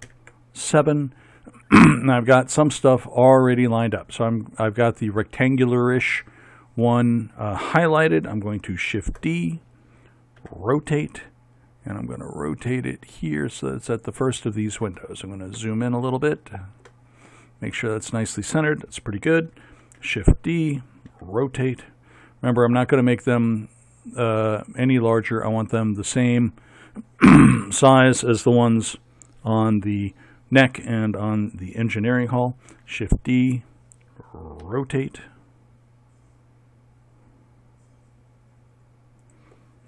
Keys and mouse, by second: 0.1 ctrl+KP_7, 8.9 shift+d, 10.4 r, 15.0-17.7 middle drag, 19.8 shift+d, 21.1 r, 32.7 shift+d, 34.7 r.